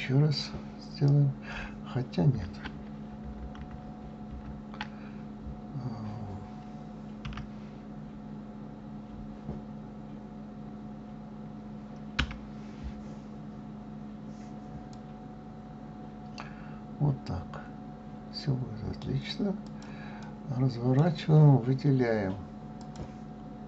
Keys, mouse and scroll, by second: 3.6 ctrl+z, 4.3 ctrl+z, 7.2 e, 14.9 click, 19.6 click, 20.2-22.8 middle drag, 22.8 click.